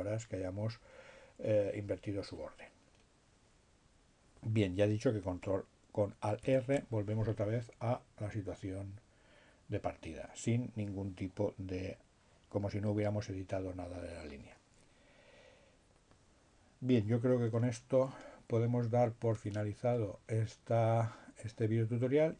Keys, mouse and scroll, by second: 5.5 alt+r.